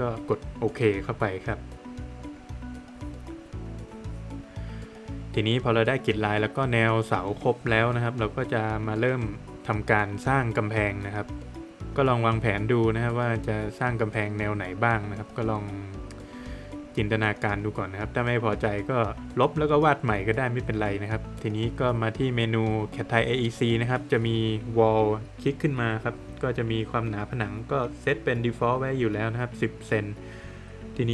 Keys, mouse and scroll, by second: 0.2 click, 1.2 Escape, 1.7 middle click, 2.3 scroll down 1, 2.5 middle click, 3.5 scroll down 1, 3.8 middle click, 6.4 middle click, 6.5-6.8 scroll down 1, 7.7 middle click, 12.4 middle click, 14.3 middle click, 14.5 middle click, 17.0-17.4 scroll up 1, 17.5 middle click, 18.2 middle click, 19.5 middle click, 23.0 click.